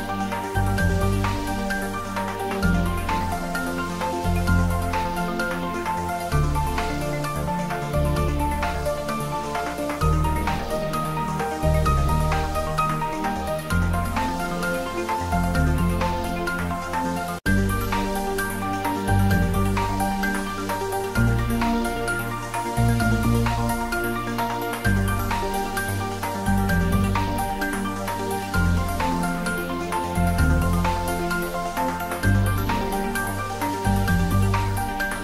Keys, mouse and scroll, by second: 1.8 space, 3.3 space, 4.1 middle click, 5.1 space, 6.3 middle click, 6.9 scroll down 1, 7.4 middle click, 8.3 click, 8.6 x, 8.8 click, 8.9-9.2 scroll down 1, 9.6 middle click, 10.5-11.3 scroll down 1, 14.2 click, 15.6 click, 18.2 click, 18.2 scroll down 1, 18.4 middle click, 19.5 click, 20.1-20.7 scroll up 1, 20.7 click, 21.2 s, 22.0 click, 22.2 ctrl+z, 22.8 s, 25.1 click, 25.5 s, 26.5 click, 26.7 scroll down 1, 26.9 middle click, 27.8 click, 28.6 g, 30.4 click, 30.7 z, 31.1 click, 31.2 shift+z, 31.4-32.0 scroll up 1, 32.0 middle click, 32.5 shift+z, 32.7 middle click, 33.6-33.9 scroll down 1, 33.9 middle click, 34.3-34.7 scroll up 1, 34.7 a, 35.1 h.